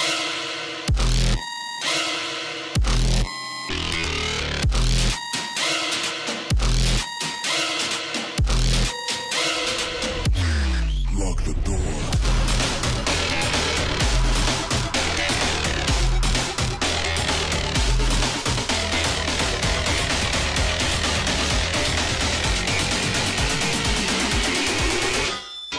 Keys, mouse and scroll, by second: 0.0 alt+scroll up 1, 0.3 space, 0.4 click, 0.6 space, 2.2 alt+scroll up 1, 2.2 space, 2.3 click, 3.5 click, 5.5-7.9 drag, 7.9 space, 13.3 click, 14.6 shift+m, 15.3 alt+click, 16.4 alt+click, 17.7 alt+scroll up 1, 17.8 space, 17.9 click, 18.1 space, 19.1 click, 20.2 space, 25.0 click, 25.4-25.7 alt+scroll down 1.